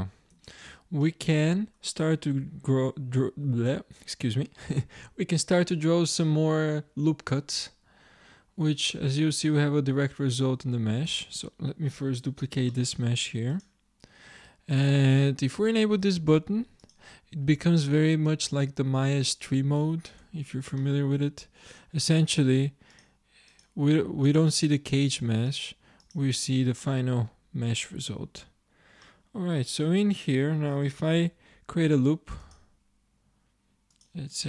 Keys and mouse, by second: 0.0 middle click, 0.4 Tab, 11.1 Tab, 12.5 shift+d, 20.3 Tab, 22.9 click, 23.5 click, 24.8-26.9 drag, 26.9-27.9 middle drag, 31.2 ctrl+r.